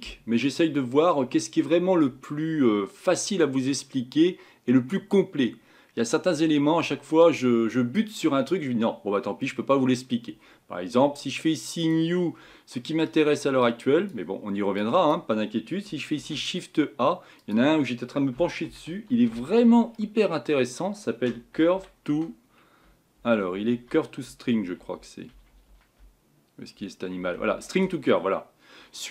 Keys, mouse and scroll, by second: 11.9-27.8 drag.